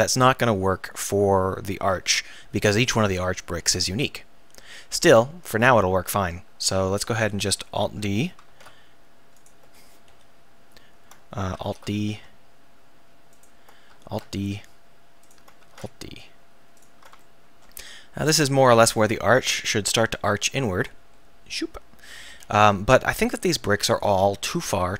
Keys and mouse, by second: 5.1-6.1 right drag, 8.5 alt+d, 9.5-10.1 drag, 10.1 KP_1, 11.6 alt+d, 13.5-14.6 drag, 14.1 alt+d, 15.7 alt+d, 19.3 KP_1, 23.5 a, 23.7 a, 24.3 KP_1.